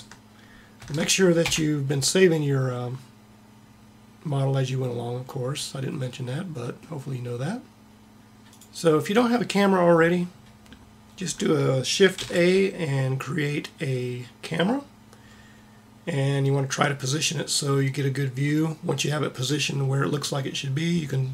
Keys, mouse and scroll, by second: 0.7 ctrl+s, 12.2 shift+a.